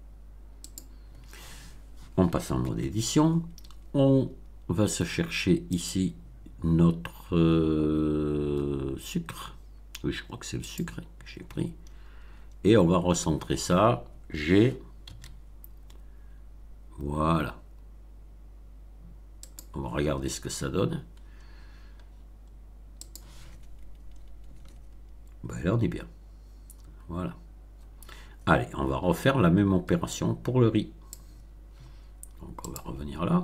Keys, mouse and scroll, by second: 0.5 click, 2.5 Tab, 5.6 click, 10.5 click, 11.4-12.5 scroll down 6, 15.0 g, 19.4 click, 21.1-23.0 scroll down 6, 23.0 click, 24.1-24.4 scroll up 2, 24.5 Tab, 30.0-31.3 drag, 32.6 click.